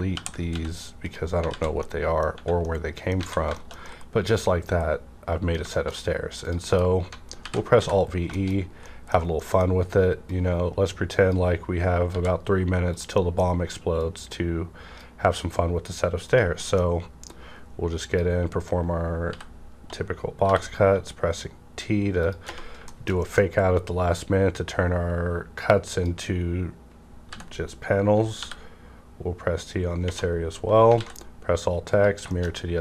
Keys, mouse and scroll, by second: 0.1 ctrl+l, 0.4 x, 1.0 click, 1.4 alt+z, 1.7 middle click, 1.8 alt+z, 1.8 middle click, 2.3 Tab, 2.6 middle click, 3.2 a, 3.5 middle click, 5.7 shift+middle click, 6.0 scroll up 1, 6.4 click, 6.7 KP_Decimal, 7.3 alt+v, 7.8 e, 8.3 shift+middle click, 8.6 scroll up 1, 8.8 middle click, 9.3 middle click, 10.3-12.9 drag, 12.1 w, 13.1 scroll up 1, 13.2 middle click, 13.2 scroll down 1, 14.0-16.6 drag, 16.6 middle click, 17.3-20.4 drag, 19.3 b, 20.4 t, 22.2 click, 22.7 `, 22.9 shift+middle click, 24.1 click, 24.2-28.3 drag, 27.3 b, 28.3 t, 30.5 scroll down 1, 31.0 alt+x, 31.2 scroll down 1, 31.9 click, 32.0 click, 32.3 shift+middle click, 32.4 shift+scroll down 1, 32.5 scroll up 1.